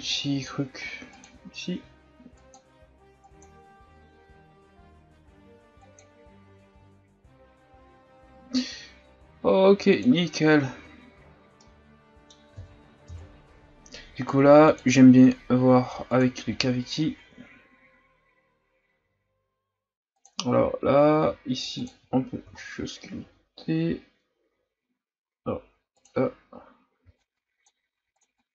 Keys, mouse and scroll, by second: 6.9-10.0 scroll down 3, 10.1-11.1 drag, 11.1-11.6 scroll down 4, 11.6-13.1 middle drag, 13.1 KP_1, 13.6-14.7 scroll up 3, 14.7-17.7 drag, 17.7-18.1 scroll down 3, 18.1-20.7 scroll up 2, 21.9 click, 22.6 scroll down 1, 26.0 scroll down 1, 26.0 click, 27.0 f, 27.3-28.5 drag.